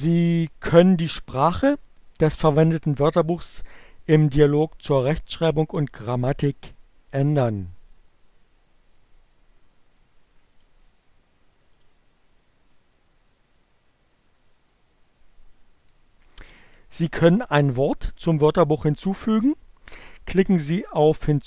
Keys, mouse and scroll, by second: 10.0 click, 11.5 click, 15.0 middle click.